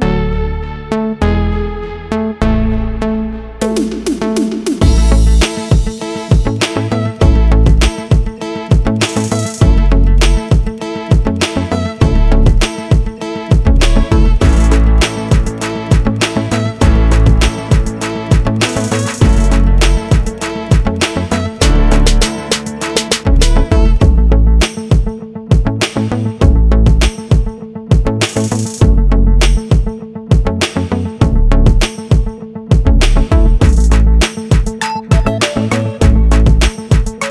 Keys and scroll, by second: 6.0 Insert.